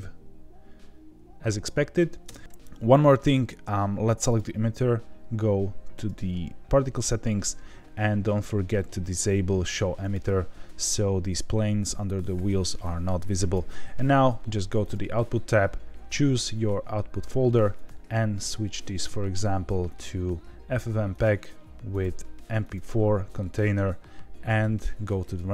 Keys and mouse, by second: 2.2 space, 6.0 click, 10.0 click, 12.8-13.5 drag, 17.8 click, 21.1 click, 21.9-22.7 drag.